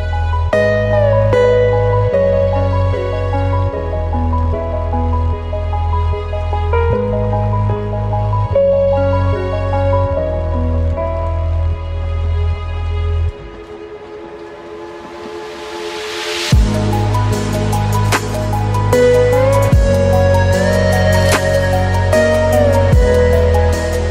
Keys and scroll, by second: 1.2 ctrl+space, 2.3 ctrl+alt+space, 12.6 ctrl+z, 14.2 ctrl+space, 15.1 ctrl+t, 15.4 ctrl+alt+space, 19.8 ctrl+t.